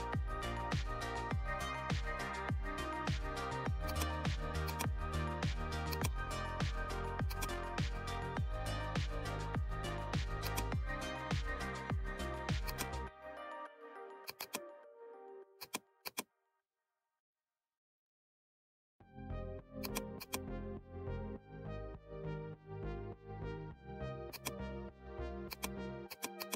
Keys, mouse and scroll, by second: 3.8-7.2 drag, 10.4 alt+click, 12.6 alt+click, 14.2-19.0 drag, 19.8-26.5 drag.